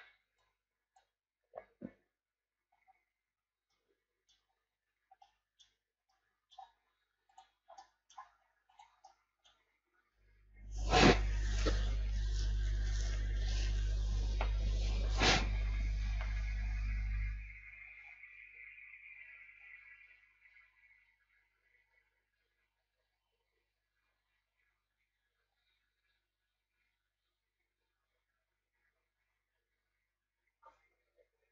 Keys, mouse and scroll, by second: 29.8-31.5 drag.